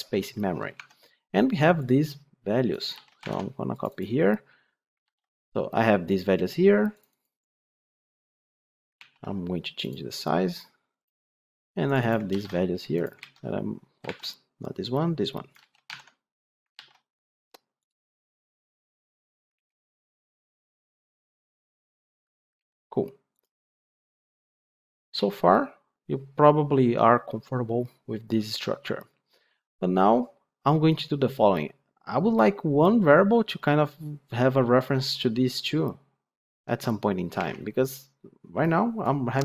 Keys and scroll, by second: 2.9 ctrl+c, 15.5 ctrl+c.